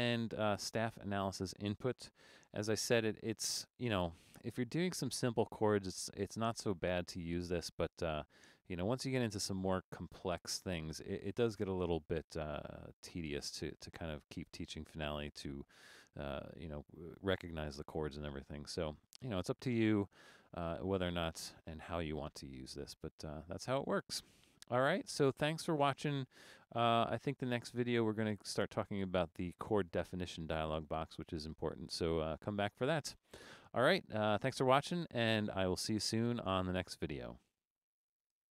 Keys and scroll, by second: 2.4 super+-, 2.7 super+-, 3.3 super+-.